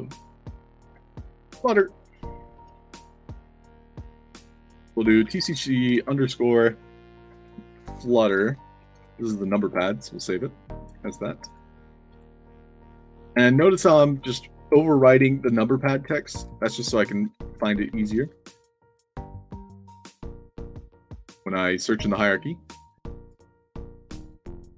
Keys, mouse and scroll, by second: 0.6-2.1 typing, 4.5 click, 5.2 shift+c, 7.2-9.0 typing, 9.5 ctrl+a, 9.7 ctrl+c, 10.7 click, 11.3 click, 12.0 click, 12.8 click, 13.8 ctrl+v, 15.2 click, 16.0 click, 16.5 ctrl+v, 17.7 space, 17.9 shift+a, 19.1 click, 19.3-20.9 typing, 22.2 drag, 22.9 drag, 23.6 click.